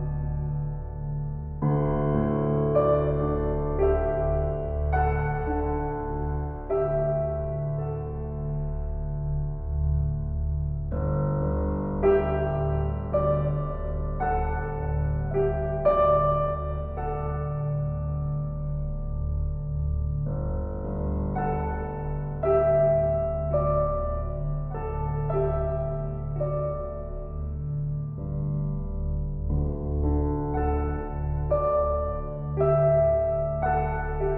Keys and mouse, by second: 0.2 click, 1.5 click, 3.0 click, 3.8 click, 7.0 click, 8.4 click, 9.0 click, 9.7 click, 12.6 click, 13.8 click, 14.3 alt+click, 15.3 click, 15.5 click, 16.0 click, 17.0 click, 19.4 click, 19.8 alt+click, 20.8 click, 21.9 click, 23.0 ctrl+alt+click, 24.5 click, 25.6 s, 27.9 click, 28.7 typing, 29.6-31.4 ctrl+alt+drag, 31.4 typing.